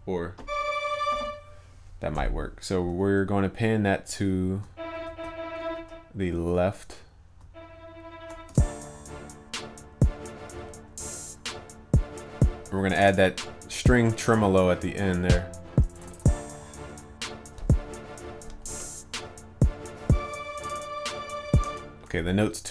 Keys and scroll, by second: 16.1 ctrl+s.